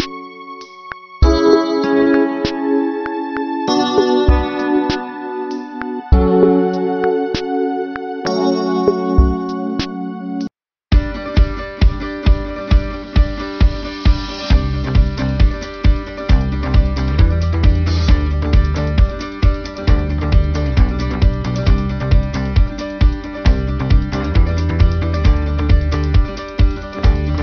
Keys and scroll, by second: 5.2 b.